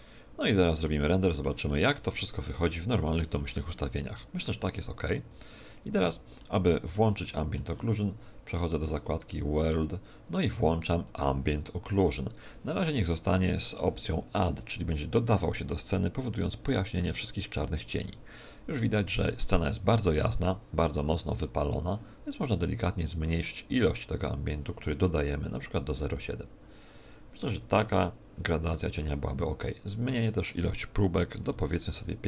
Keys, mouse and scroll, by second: 1.1 middle click, 1.7 middle click, 5.1 Escape, 6.3 middle click, 7.2 middle click, 8.5 click, 11.0 click.